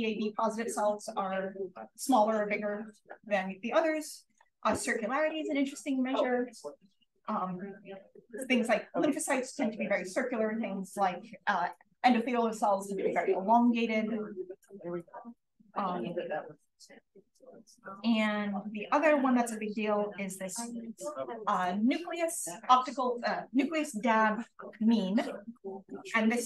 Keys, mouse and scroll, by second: 4.2 click, 4.7 click, 7.4-8.5 scroll down 1, 8.5-10.1 scroll down 1, 10.1-13.6 scroll down 1, 13.6-14.9 scroll down 1, 16.6-19.1 drag.